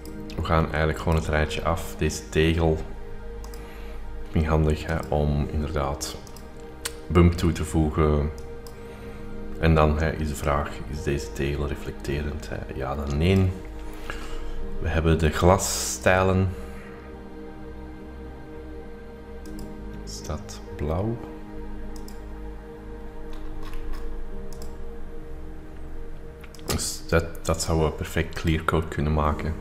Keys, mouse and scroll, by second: 1.3 click, 3.7 click, 4.9-5.9 drag, 6.3-7.3 drag, 8.4 click, 10.5-13.6 drag, 15.9 click, 19.5 click, 22.0 click, 23.3-24.9 scroll down 2, 24.9-26.5 drag, 26.5 click, 28.4-29.6 drag.